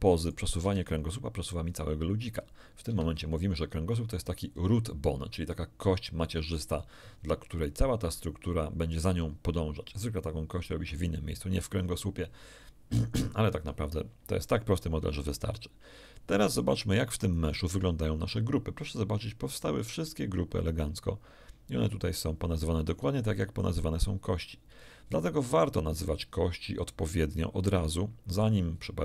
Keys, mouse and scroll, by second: 0.1 right click, 0.6 g, 2.9 Escape, 7.6-9.1 middle drag, 17.3 right click, 25.7-28.5 middle drag.